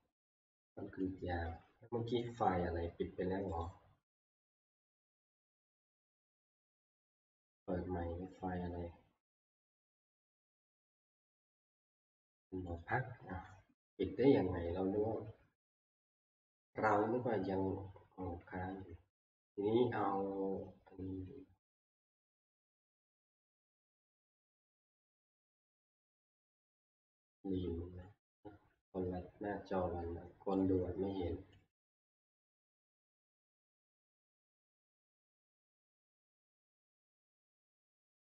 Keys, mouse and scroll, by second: 0.9 click, 3.6 right click, 3.6 click, 10.1 click, 12.8 right click, 20.6-22.2 scroll down 1, 22.2 scroll down 1, 22.3 middle click, 28.9 middle click, 31.6 click, 36.5 click, 37.5 click.